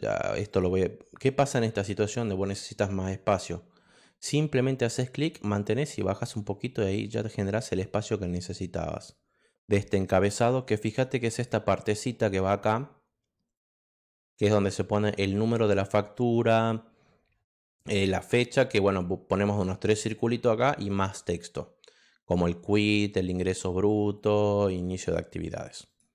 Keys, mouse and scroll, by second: 0.5 click, 5.1 click, 7.0 click, 8.9 click, 25.8 click.